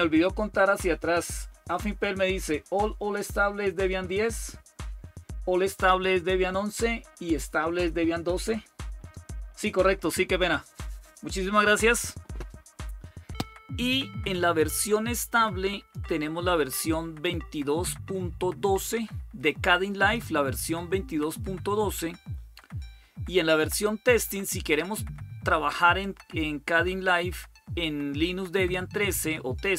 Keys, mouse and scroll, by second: 4.0 click, 13.6-15.7 drag, 16.0 click, 25.8-28.9 drag, 29.4-29.7 drag.